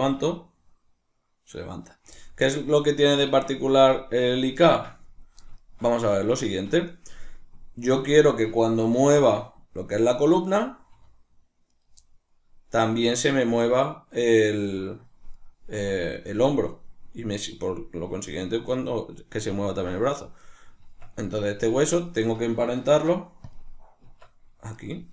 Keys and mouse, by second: 0.1-1.9 middle drag, 0.1 r, 1.9 right click, 3.3-8.2 ctrl+middle drag, 8.2 right click, 9.0 r, 10.4 right click, 11.0 r, 11.8 right click, 12.9 right click, 15.4 right click, 15.8 r, 16.3 right click, 20.4 right click, 20.8 Tab, 22.0 shift+right click, 22.8 ctrl+p, 24.0 Tab, 24.8 right click.